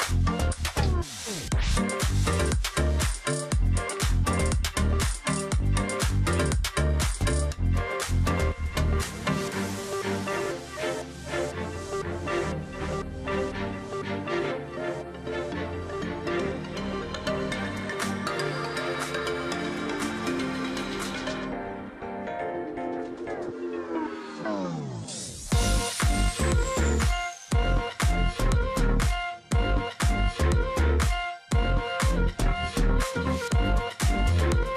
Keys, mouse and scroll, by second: 0.0 alt+click, 2.0 shift+click, 3.1 alt+click, 3.3 alt+scroll down 1, 4.3 space, 6.0-6.4 alt+scroll up 1, 7.0 space, 7.5 ctrl+click, 7.7 alt+scroll down 1, 7.8 space, 8.1-9.1 alt+scroll up 1, 10.8 ctrl+click, 10.9 ctrl+double click, 11.3 ctrl+click, 11.5 alt+scroll down 1, 12.0 space, 12.3-12.7 alt+scroll up 1, 13.5 ctrl+click, 13.7-14.5 alt+scroll up 3, 14.9 space, 15.9 space, 16.5 space, 17.9 ctrl+click, 18.3-18.7 alt+scroll up 1, 18.7 ctrl+click, 19.1 ctrl+shift+click, 20.1 alt+click, 20.4 ctrl+click, 20.7 ctrl+z, 21.0 alt+click, 21.2 ctrl+click, 21.3-21.7 alt+scroll down 1, 21.7 space, 22.7-23.2 alt+scroll up 1, 24.2 alt+scroll up 1, 25.9 space, 27.0 space, 27.9 double click, 29.1 alt+click, 30.0 alt+click, 31.7 double click, 32.2 shift+click, 33.6 shift+click, 34.4 alt+click, 34.6 ctrl+click.